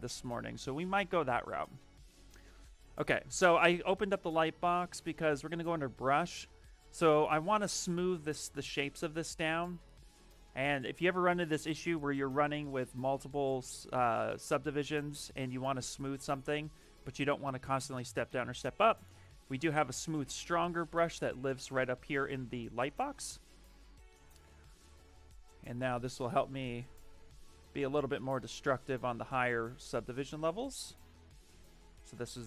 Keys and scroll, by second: 22.4 ,, 23.0 ,.